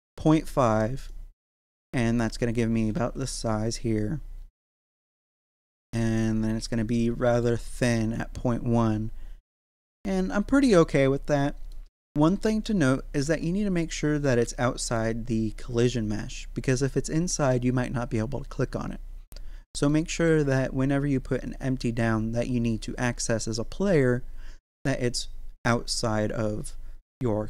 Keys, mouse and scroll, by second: 1.1-2.9 middle drag, 2.9 z, 4.6-9.6 middle drag, 9.6 z, 10.2-13.2 middle drag, 13.2 shift+2, 14.2-19.9 middle drag, 19.9-27.1 middle drag, 27.1 middle click.